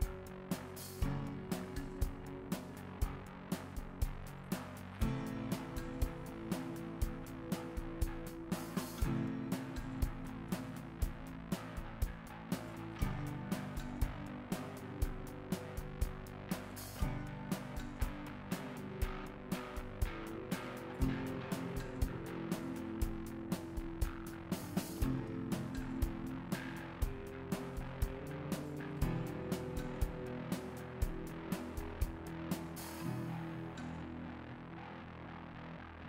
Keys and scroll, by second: 1.2 ctrl+x, 2.7 ctrl+x, 6.7 alt+x.